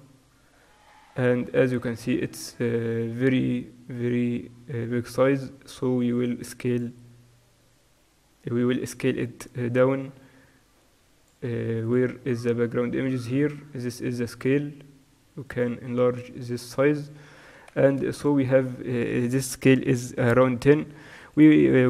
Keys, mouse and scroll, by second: 0.0-15.9 middle drag, 15.9-21.8 drag.